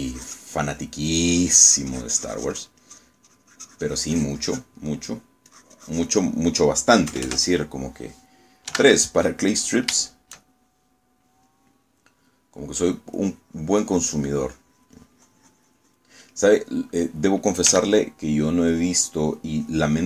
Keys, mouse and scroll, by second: 0.1 middle click, 0.7 click, 1.7 middle click, 2.4-3.9 drag, 5.1-6.4 drag, 5.9 middle click, 6.6 click, 8.2 KP_Add, 9.8 3, 11.5-13.3 shift+middle drag, 13.5 middle click, 14.3-17.2 drag, 18.8 f, 19.8 click.